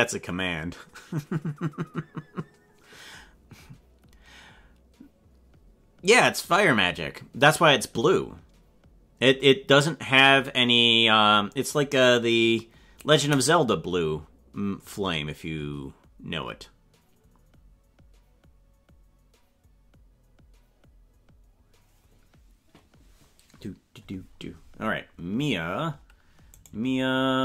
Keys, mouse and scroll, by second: 26.7 right click.